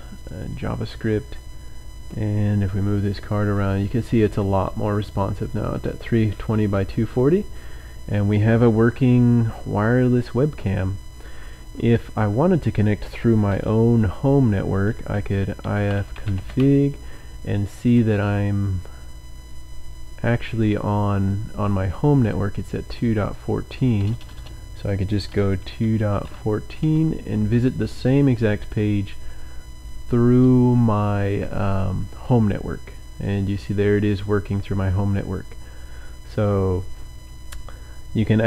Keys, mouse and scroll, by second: 0.1 click, 1.3-1.9 scroll down 4, 12.0 click, 15.1-18.9 typing, 17.8 click, 18.1-19.7 scroll up 6, 20.5 click, 22.3 click, 23.2 click, 24.1 BackSpace, 25.2 KP_2, 25.7 KP_Decimal, 26.0 KP_1, 26.3 KP_4, 26.8 KP_Enter, 33.1 click, 34.1-34.9 scroll down 4, 35.7-36.1 scroll up 2.